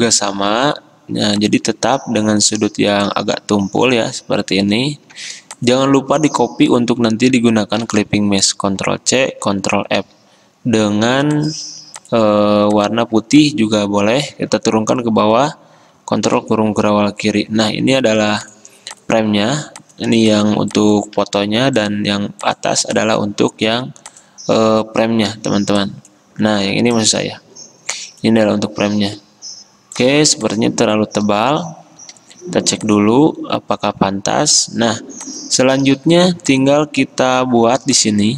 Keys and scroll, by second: 5.2 v, 7.9 ctrl+c, 9.3 ctrl+f, 10.0 d, 16.3 ctrl+[, 21.3 ctrl+z, 23.7 ctrl+z, 25.3 ctrl+2, 26.5 ctrl+z, 28.7 ctrl+z.